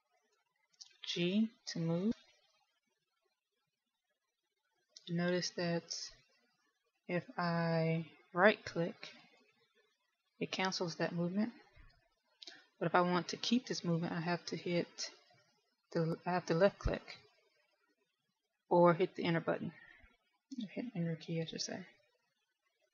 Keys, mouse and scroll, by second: 1.8 g, 10.7 right click, 12.8 g.